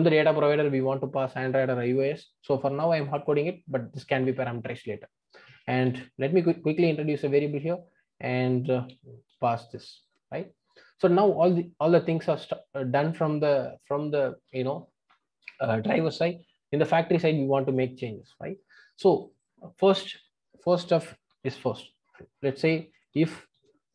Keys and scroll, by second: 5.8 alt+Return.